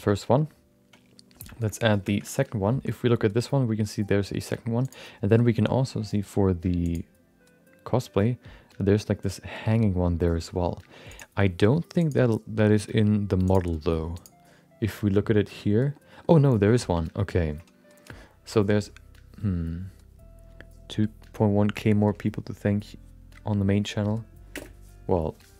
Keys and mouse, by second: 0.1 middle click, 1.5 shift+middle click, 1.7 middle click, 2.3 Tab, 4.8 click, 11.1 click, 16.0 middle click.